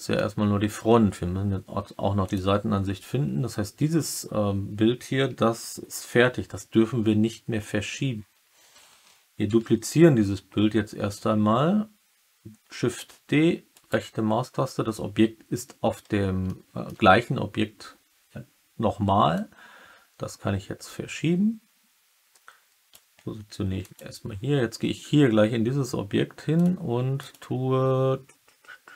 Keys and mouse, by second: 0.1-0.7 alt+middle drag, 9.4 shift+d, 13.7 right click, 16.4-16.8 alt+middle drag, 19.4-22.9 drag, 23.7 click, 27.1 click.